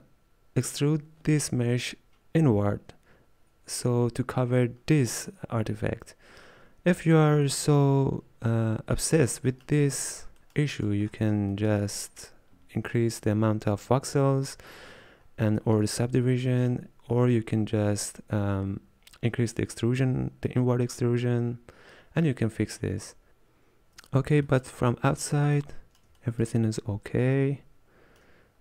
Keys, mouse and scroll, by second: 15.6-16.2 scroll down 1, 16.6-16.9 scroll down 1, 23.5-24.6 scroll down 7, 24.6 middle click, 25.4 scroll down 1, 25.7-26.9 middle drag, 26.9-27.7 scroll up 2, 27.7-28.6 shift+middle drag.